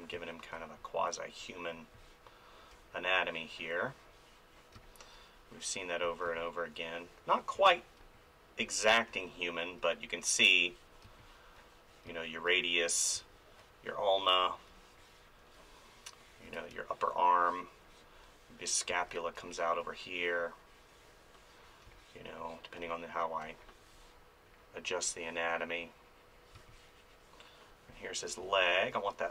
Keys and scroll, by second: 0.1 space, 4.7 space, 11.0 space, 16.4 ctrl+z, 16.7 space, 18.9 space, 21.8 space, 26.5 space, 28.4 space.